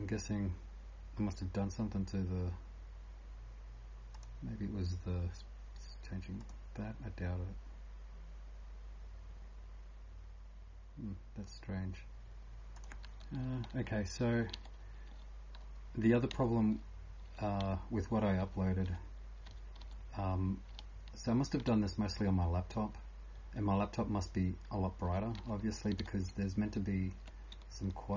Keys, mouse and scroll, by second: 4.2 click, 6.4 click, 16.3-28.1 typing.